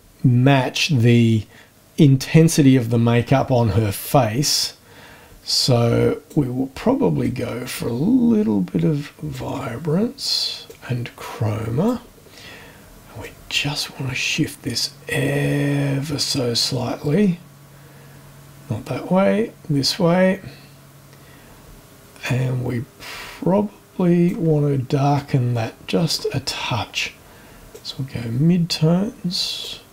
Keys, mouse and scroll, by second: 4.0-6.5 drag, 7.2-9.5 drag, 10.7-12.1 drag, 13.2-24.5 drag, 25.1-26.3 drag, 27.7-29.8 drag.